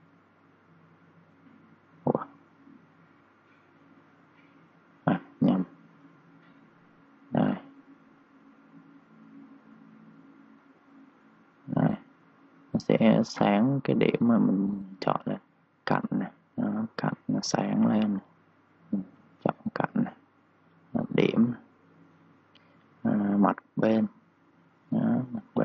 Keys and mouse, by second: 0.9-2.0 typing, 1.0 click, 3.0 click, 5.0-7.5 typing, 5.5 click, 7.6 click, 9.9-11.6 typing, 10.2 click, 10.9 click, 11.2 click, 12.8 3, 12.9 click, 13.3 3, 13.9 click, 19.9 ctrl+z, 22.1 Return, 23.3 click.